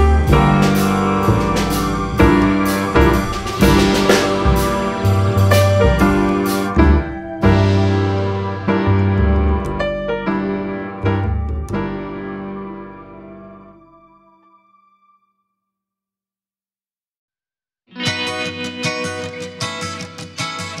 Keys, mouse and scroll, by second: 0.2-0.6 scroll down 1, 0.6-1.1 scroll up 2, 1.1-2.2 scroll down 2, 3.3-4.0 scroll down 2, 5.5-6.5 drag, 7.2 click, 7.4 scroll up 1, 8.1-10.8 drag, 11.0-11.4 scroll up 2, 11.5 scroll down 2, 12.2 click, 12.6 click, 13.7 click, 14.6 click, 15.3-18.1 right drag, 18.4 click, 18.7-19.0 scroll up 1, 19.3-20.8 drag.